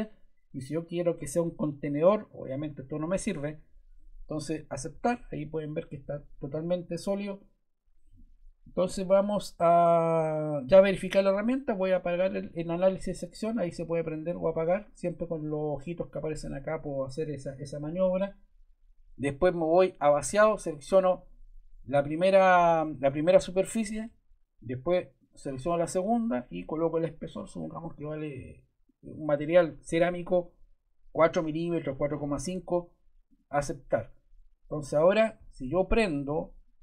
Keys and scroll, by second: 27.8 4.